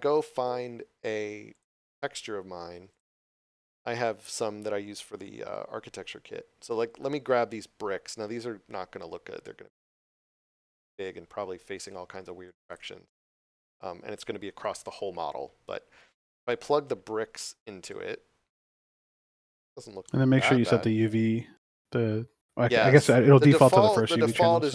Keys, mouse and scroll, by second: 1.5 click, 9.7 click, 12.4 click, 16.5 click, 20.0 middle click, 23.6 shift+middle click.